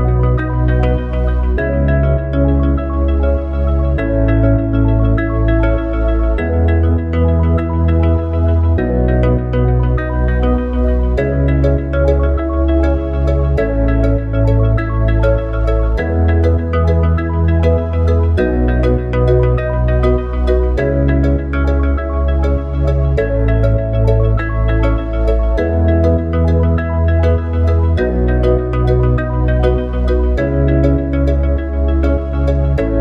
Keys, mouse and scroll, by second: 0.0 n, 8.2-12.8 drag, 20.9 ctrl+v, 21.5 click, 23.5 click, 24.3 shift+click, 25.7 ctrl+c, 26.2 ctrl+v, 26.6 click, 30.2 click, 32.7 click.